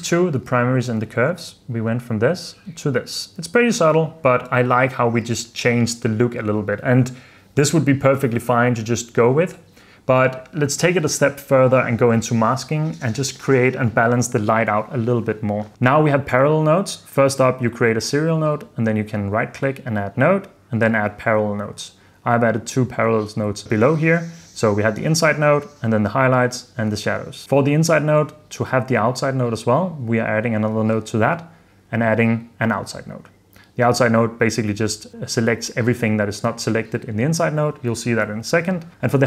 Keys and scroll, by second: 1.1 super+f, 1.6 super+d, 2.6 super+d, 3.5 super+f, 4.0 super+s.